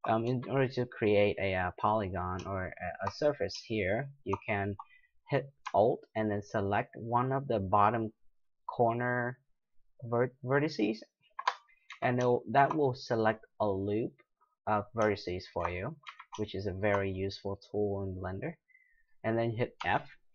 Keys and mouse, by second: 0.3 z, 3.3-6.6 middle drag, 11.1-12.5 right drag, 11.9 z, 16.1 z, 17.3-18.3 middle drag, 19.8 f.